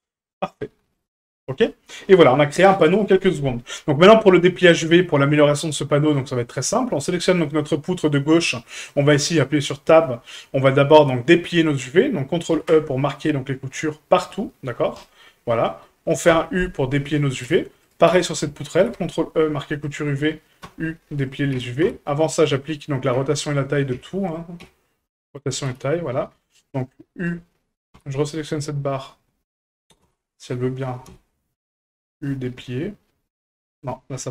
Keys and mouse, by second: 4.7 shift+middle drag, 5.4 middle click, 5.9 shift+middle drag, 6.6 right click, 7.2 shift+middle drag, 8.7 middle click, 9.1 Tab, 9.7 middle click, 12.5 ctrl+e, 15.5 middle click, 16.3 u, 17.4 Tab, 17.8 right click, 18.1 Tab, 18.8 ctrl+e, 20.6 u, 21.5 Tab, 21.8 q, 23.1 a, 23.9 a, 24.6 q, 25.7 Tab, 27.2 right click, 27.9 l, 30.0 l, 31.1 u, 32.4-33.8 middle drag.